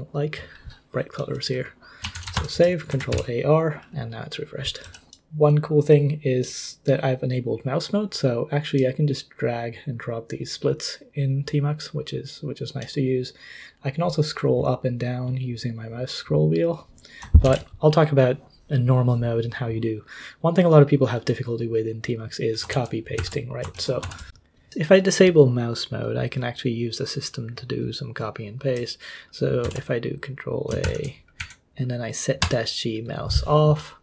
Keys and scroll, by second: 1.9-3.1 typing, 2.9 ctrl+a, 4.8 k, 17.4 ctrl+c, 22.7 ctrl+l, 23.2 ctrl+h, 23.7 ctrl+l, 24.0 ctrl+h, 29.6 ctrl+a, 30.8 :, 31.4 Up, 32.4 Return.